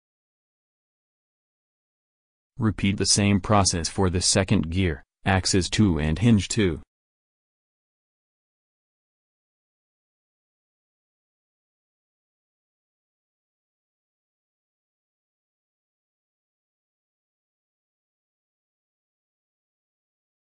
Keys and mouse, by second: 1.6-3.4 drag, 5.3-6.6 drag, 6.3 ctrl+v, 10.3-12.1 drag, 13.1-14.2 drag, 14.2 middle click, 14.8-16.0 drag, 16.5 middle click, 18.5 middle click.